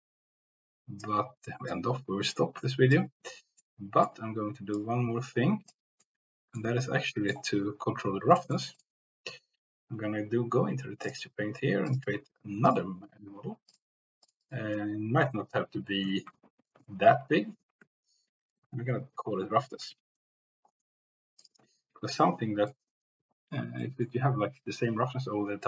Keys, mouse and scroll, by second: 3.7 click, 4.8 click, 6.1-7.3 drag, 8.4 shift+middle click, 11.0 click, 11.8 click, 12.2-21.5 drag, 19.9 s, 22.3 middle click, 23.8 middle click.